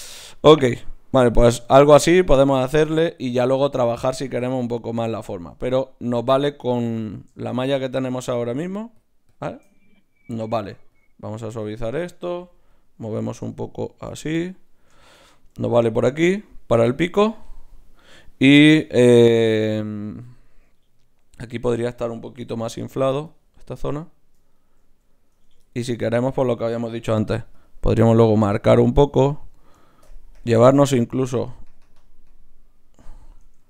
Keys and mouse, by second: 1.1-6.3 drag, 8.2-17.2 drag, 22.4 i, 22.6-25.9 drag, 24.5-25.9 right drag, 25.3 Tab, 27.1 ctrl+r, 33.4 ctrl+Tab.